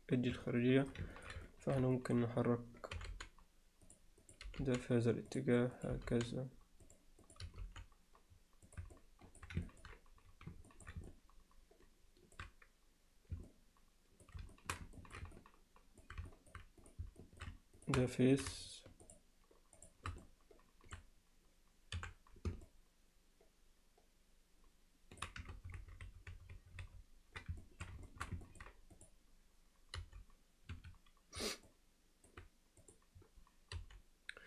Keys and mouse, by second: 0.5 alt+middle click, 1.2 ctrl+middle click, 1.5-1.8 alt+middle drag, 2.0 ctrl+alt+middle click, 3.0 g, 4.3 click, 4.5 g, 5.8 click, 5.9 g, 7.3 click, 7.5 g, 9.0 alt+middle click, 9.7 ctrl+alt+middle click, 10.7 ctrl+alt+middle click, 11.1-12.4 alt+middle drag, 13.5 middle click, 14.5 alt+shift+middle click, 15.0 ctrl+middle click, 15.4 middle click, 16.3 alt+middle click, 17.2 alt+middle click, 17.8 shift+click, 18.1 alt+middle click, 19.1 shift+click, 19.8 shift+click, 20.2 alt+middle click, 22.7-25.3 middle drag, 25.6 ctrl+z, 25.8-26.9 ctrl+z, 27.6 alt+middle drag, 28.1 alt+shift+middle click, 28.5 ctrl+alt+middle click, 31.7-32.3 middle drag, 32.9 click, 33.8 g.